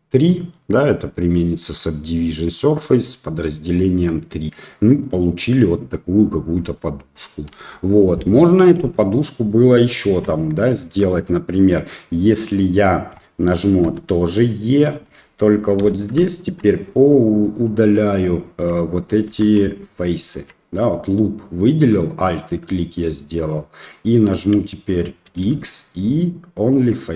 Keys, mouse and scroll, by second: 3.7 middle click, 4.4 scroll up 1, 5.0 middle click, 5.9 middle click, 7.6 Delete, 8.4-8.7 middle drag, 9.4 click, 9.9 shift+middle click, 10.3-10.6 middle drag, 10.9 Tab, 11.2 middle click, 13.8 e, 15.8 2, 16.2 shift+middle click, 16.9 alt+click, 17.4 alt+click, 19.3 3, 19.9 alt+click, 25.4 x.